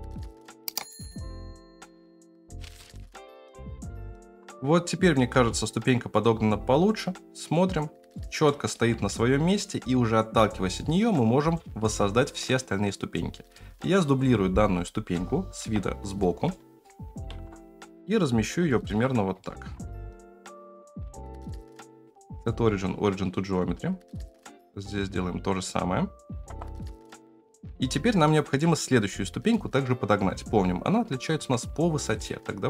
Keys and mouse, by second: 0.0-3.7 typing, 1.5 Tab, 2.0 Tab, 2.9 ctrl+v, 4.0 shift+middle click, 4.2 shift+middle click, 5.3 space, 8.2-8.8 shift+middle drag, 11.4 space, 12.9-13.6 right drag, 15.2 KP_3, 15.6 KP_1, 16.5-16.8 shift+middle drag, 17.3 shift+d, 18.7 shift+middle drag, 19.4-19.7 shift+middle drag, 20.0 g, 22.2-23.3 right drag, 23.6 click, 26.5 KP_0, 28.2 shift+middle drag, 31.4 Tab.